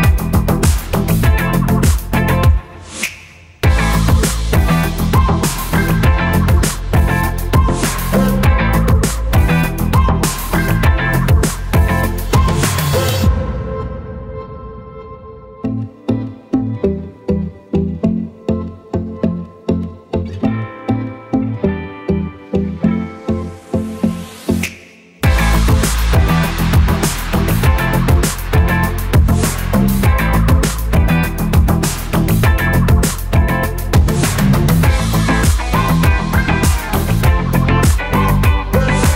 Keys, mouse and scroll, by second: 4.5 click, 4.9 click, 5.2 click, 5.7 click, 6.2 click, 7.1 click, 10.8 click, 14.2 click, 14.8 alt+shift+click, 16.1 click, 23.9 click, 30.8 click, 31.9 alt+shift+click, 35.6 click.